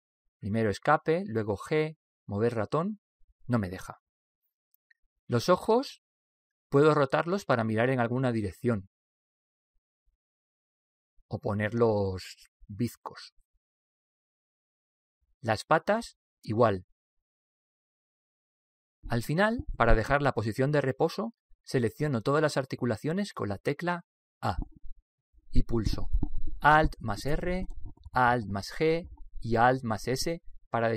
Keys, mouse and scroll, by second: 0.1 g, 7.1 right click, 8.4 r, 10.9 right click, 11.8 r, 17.3 right click, 18.1 r, 19.9 right click, 20.8 r, 24.9 a, 27.7 alt+r, 30.3 alt+g, 30.3 alt+s.